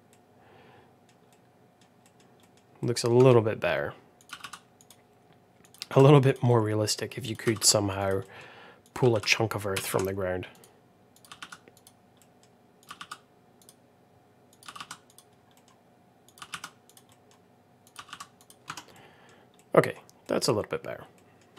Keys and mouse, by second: 0.0 middle click, 1.2 middle click, 1.9 middle click, 2.3 middle click, 2.7 middle click, 3.1 Tab, 4.2 g, 5.5 click, 5.7 g, 6.4 middle click, 7.1 click, 7.4 g, 8.1 middle click, 8.8 click, 9.0 g, 11.1 click, 11.3 g, 12.1 middle click, 13.0 g, 14.7 g, 15.4 middle click, 16.2 click, 16.4 g, 17.0 middle click, 17.8 click, 17.9 g, 19.1 Tab, 19.1 middle drag, 19.5-19.8 middle drag, 20.1 middle drag, 21.1 middle click.